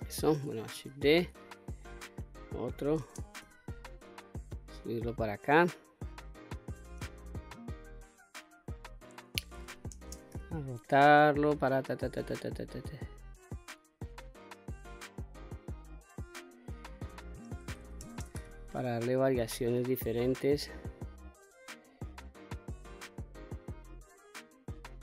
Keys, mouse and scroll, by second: 0.5 shift+d, 1.4 right click, 2.6 shift+space, 3.8-6.4 drag, 7.2 click, 9.5 shift+space, 11.1-16.7 drag, 17.6 shift+space, 18.9-20.3 drag, 21.4-24.7 drag.